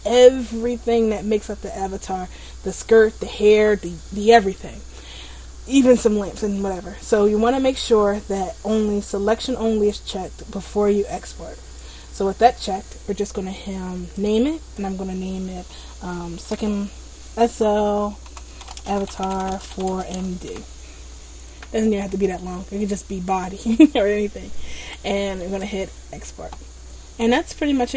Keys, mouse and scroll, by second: 26.2 click.